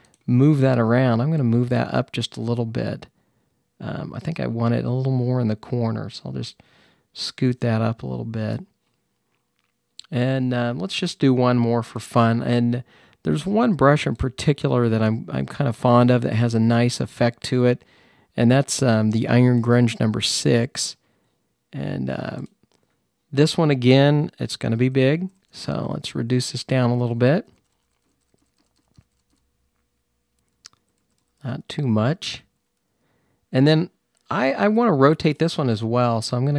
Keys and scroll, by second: 24.6-29.2 typing, 30.6-32.4 typing, 34.1-35.7 typing.